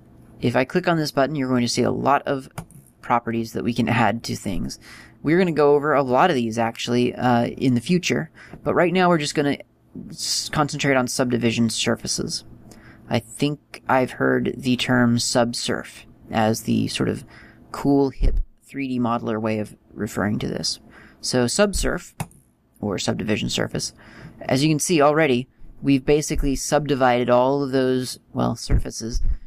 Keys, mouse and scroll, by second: 2.5 click.